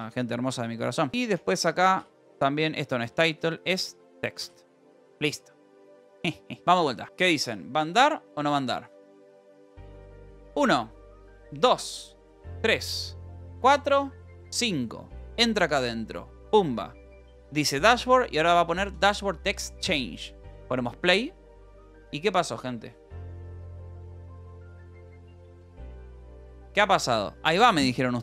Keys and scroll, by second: 1.1-4.6 typing, 1.3 Return, 4.9 ctrl+s, 6.1 ctrl+s.